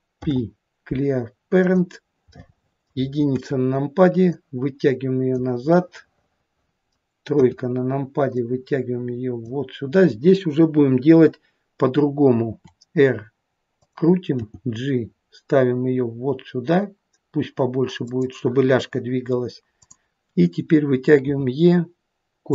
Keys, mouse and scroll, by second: 0.2 alt+p, 2.4 middle click, 2.8 middle click, 4.4 click, 4.4 KP_1, 5.8 middle click, 6.3 middle click, 7.5 KP_3, 8.4 click, 12.5 r, 14.4 g, 19.8 click, 21.4 e.